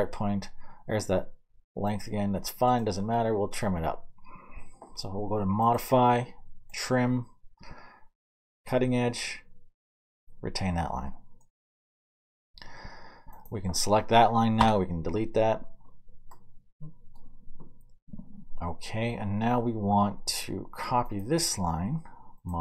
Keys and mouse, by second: 3.2 middle click, 3.4 middle click, 3.6-6.8 middle drag, 6.8 click, 7.0-14.7 middle drag, 14.6 Delete, 16.7-22.6 middle drag.